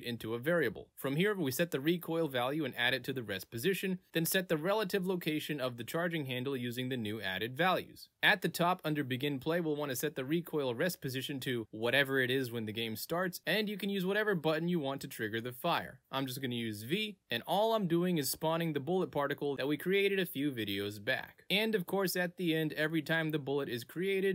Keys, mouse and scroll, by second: 0.2 click, 0.7 click, 2.4 click, 3.8 click, 9.5 click, 10.4 click, 10.9 click, 11.7 click, 12.4 click, 12.8 click, 13.2 click, 14.1 click, 16.7 click, 23.4 click.